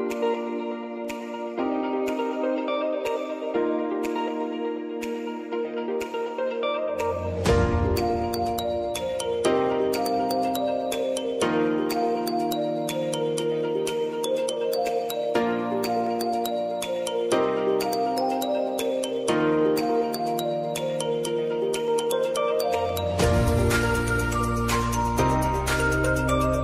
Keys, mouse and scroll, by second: 0.5 space, 7.9 space, 8.6-10.0 drag, 10.8 p, 11.7 click, 12.0 s, 12.4 click, 13.0 u, 13.5 space, 15.9-17.3 drag, 17.3 ctrl+z, 17.7-22.6 drag, 22.6 space.